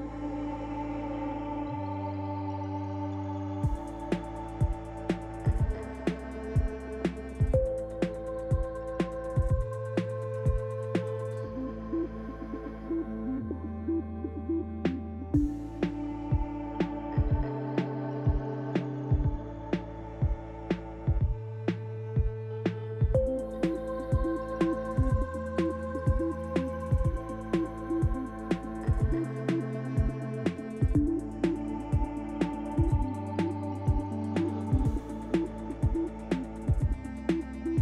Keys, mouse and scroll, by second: 0.0 click, 0.9 click, 1.5 click, 2.1 Tab, 2.4-3.5 scroll down 4, 2.8 middle click, 5.3 scroll up 1, 6.5 click, 7.8 click, 8.4 click, 9.5 Tab, 10.9 click, 12.0 l, 13.3 click, 14.3 click, 16.5 click, 17.6 Tab, 19.0 click, 22.0-22.3 scroll up 1, 22.5 shift+middle click, 22.5 scroll up 1, 24.1 click, 26.6 click, 27.9 click, 33.5 scroll down 2, 33.9 shift+middle click, 35.6 scroll up 1, 36.5 click.